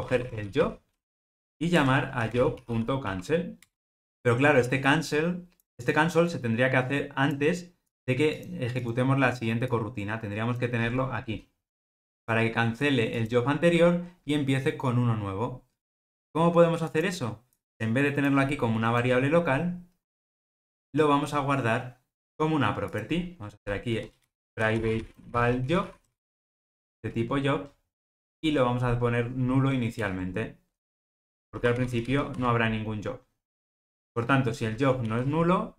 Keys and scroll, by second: 10.8 super+x, 30.2 alt+Return.